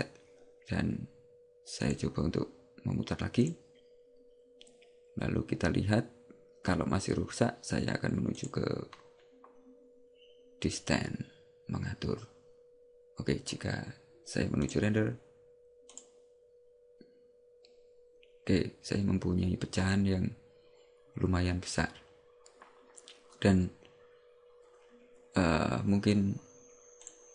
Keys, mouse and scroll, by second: 1.9 click, 8.6 click, 14.7 click, 16.0 click.